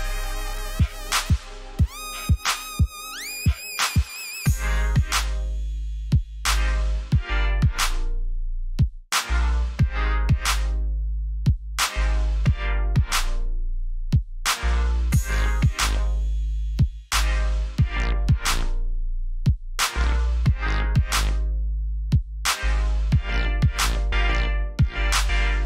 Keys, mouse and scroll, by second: 12.2 click, 13.7 alt+scroll up 2, 14.2 scroll up 1, 15.0-15.5 scroll down 2, 16.1 scroll up 1, 17.3 click, 25.3 scroll down 1.